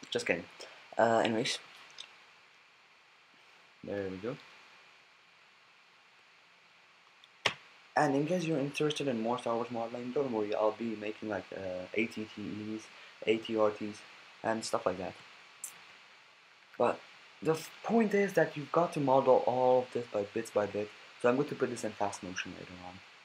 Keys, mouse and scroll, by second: 1.2-1.8 middle drag, 6.2 middle click, 7.4 KP_1, 13.8-15.1 middle drag, 15.1 Tab, 15.8 Tab, 16.6 a, 20.6 b.